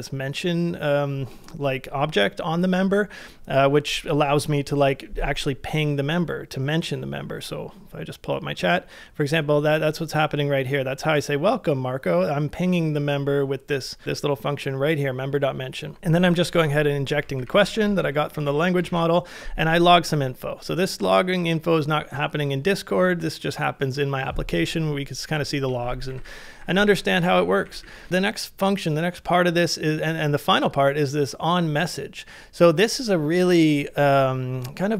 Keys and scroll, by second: 16.3 shift+v, 17.1 ctrl+c, 17.7 ctrl+c, 18.5-18.9 typing, 25.9-28.6 typing.